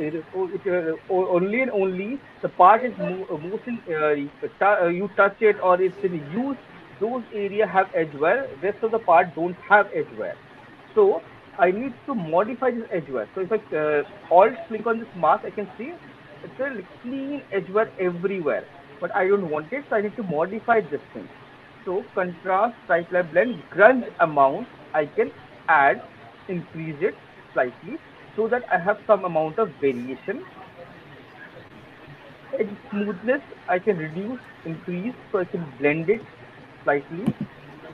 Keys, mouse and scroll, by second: 11.2 alt+right click, 11.9 alt+click, 12.7 alt+click, 15.4 alt+right click, 15.8 alt+middle click, 16.3 alt+click, 17.5 alt+middle click, 17.9 alt+right click, 18.3 alt+click, 18.5 alt+middle click, 19.6 click, 22.4 middle click, 23.0 middle click, 27.5 click, 30.2 alt+middle click, 30.6 alt+click, 31.6 middle click, 35.9 click, 37.2 alt+click, 37.6 alt+middle click.